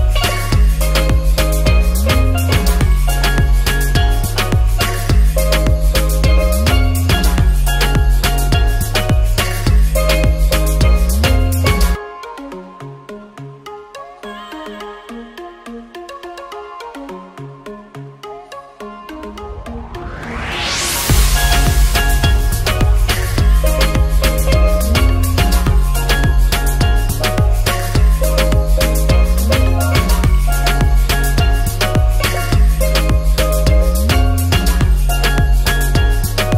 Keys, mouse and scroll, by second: 0.1 middle click, 0.1 shift+a, 2.1 drag, 2.7 click, 4.1-5.3 drag, 5.7 n, 8.3 click, 9.7 shift+a, 10.0 middle click, 11.3 n, 11.8 middle drag, 12.5 shift+a, 12.6 middle click, 15.3 click, 15.8 click, 16.9 click, 18.4 click, 28.7 click, 35.0-35.3 alt+middle drag, 35.7 ctrl+s, 36.1 drag, 36.3 alt+shift+middle click.